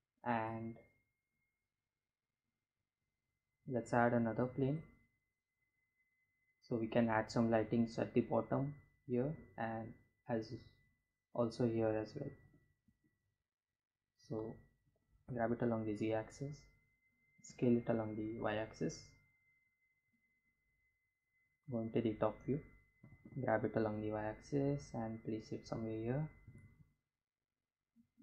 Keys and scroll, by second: 2.6 shift+a, 13.3 g, 14.0 z, 15.4 s, 15.7 y, 19.7 Home, 21.0 g, 21.3 y, 24.5 g, 25.7 x, 26.8 s, 27.0 x.